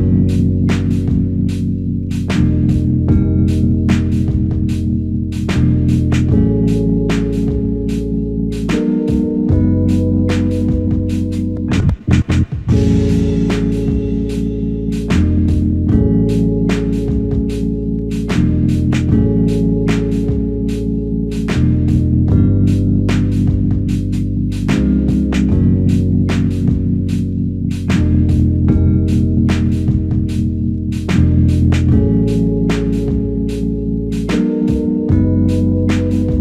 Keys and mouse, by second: 2.6 ctrl+click, 13.1 double click, 27.8 double click, 33.1 alt+click.